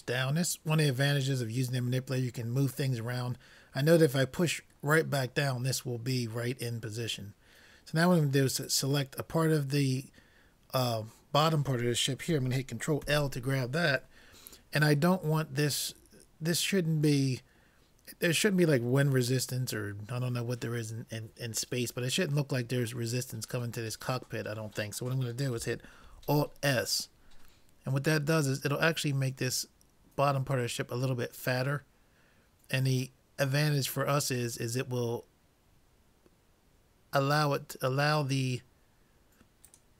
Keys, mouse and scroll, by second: 3.2-6.7 middle drag, 6.8 middle click, 8.7-10.5 drag, 13.1 ctrl+l, 15.1-17.1 middle drag, 26.1 alt+s.